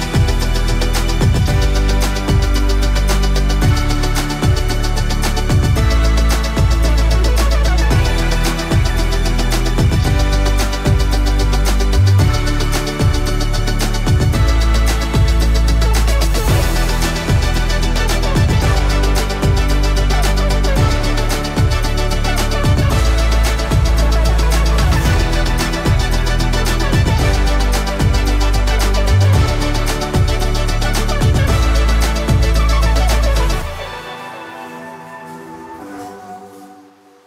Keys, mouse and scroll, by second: 1.8 0, 3.6-5.6 drag, 6.4 right click, 7.3-9.5 drag, 9.5 Return, 10.2-12.8 typing, 12.6 click, 13.6 ctrl+space, 14.4-15.8 typing, 15.6 click, 17.4-20.5 drag, 24.6-37.2 drag.